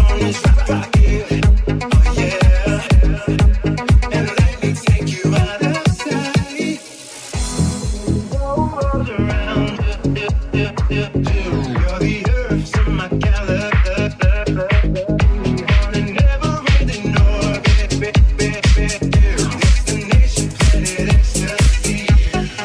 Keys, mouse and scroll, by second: 0.6 middle click, 1.1-6.4 alt+middle drag, 5.7 alt+z, 6.4 click, 6.4 shift+middle click, 7.0 click, 7.1-22.6 middle drag, 8.0 j, 8.9 right click, 9.6 click, 10.2 j, 10.3 alt+z, 10.8 right click, 11.9 3, 12.1 alt+2, 12.1 shift+right click, 12.4 right click, 12.7 right click, 13.0 right click, 13.4 right click, 13.7 right click, 14.0 shift+right click, 14.4 shift+right click, 14.7 shift+right click, 22.4 i, 22.5 alt+z.